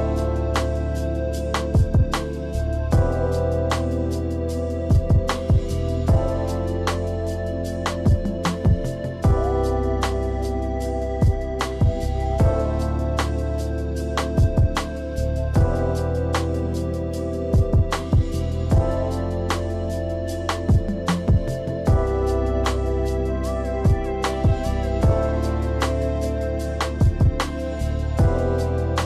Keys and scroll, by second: 1.0 ctrl+z, 10.5 space, 11.3 space, 12.9 space, 13.5 space, 16.9 space, 20.0 space.